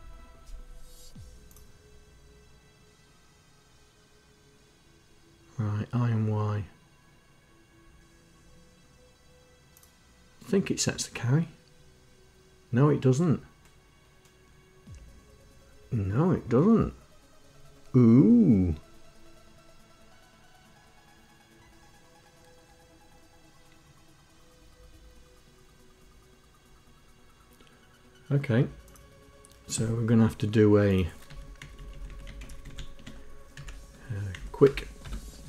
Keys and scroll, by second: 31.2 Down, 31.5 Left, 31.7 Left, 32.0 Left, 32.3 shift+End, 32.6 shift+End, 33.5 Up, 34.3 Left, 34.6 Return, 35.0 Tab.